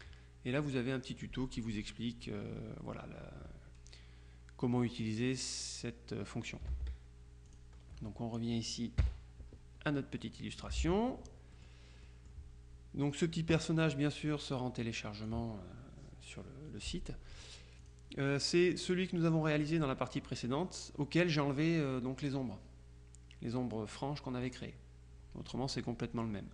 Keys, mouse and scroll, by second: 6.8 alt+Tab, 7.6 click, 9.1 KP_Subtract, 10.3 click, 10.8 ctrl+z, 11.6 click, 13.2 click, 14.0 click, 17.9 click.